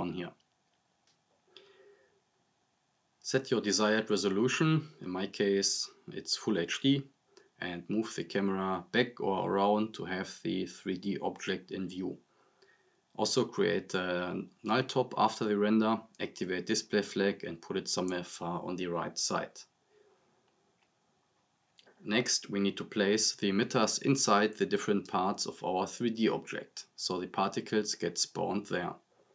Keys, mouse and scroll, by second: 2.3-3.7 drag, 6.5-7.1 drag, 9.3-13.0 drag, 14.5 right click, 15.7 click, 17.9 scroll down 1, 18.4-19.5 drag, 20.8 scroll up 1, 27.8 click.